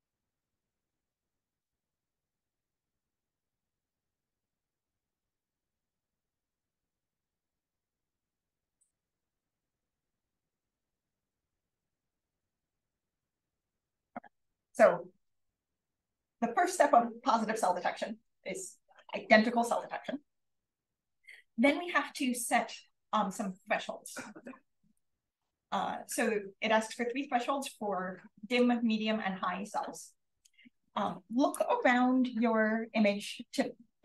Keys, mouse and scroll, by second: 0.0 click, 1.8 1, 2.3 click, 2.8 click, 3.8 5, 4.8 click, 5.4 BackSpace, 6.0 2, 7.0 click, 8.2 3, 10.5 click, 25.0 click, 25.6-27.9 scroll down 2, 27.9-29.9 scroll down 1, 29.9-30.5 scroll down 1, 30.5 scroll down 1, 30.7 click.